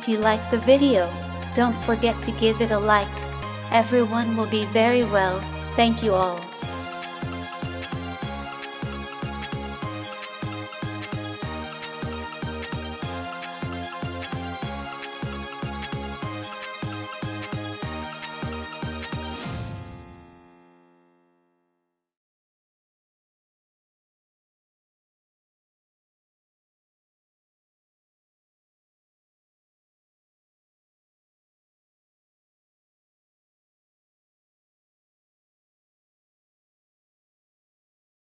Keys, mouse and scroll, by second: 8.2 KP_2.